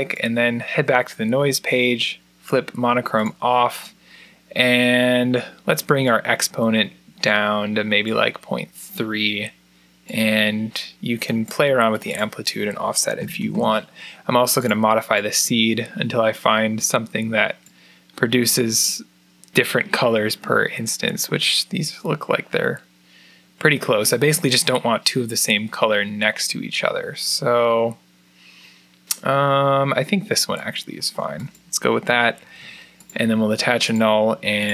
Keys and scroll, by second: 12.7-13.7 typing, 17.8-18.5 typing, 32.2 alt+n.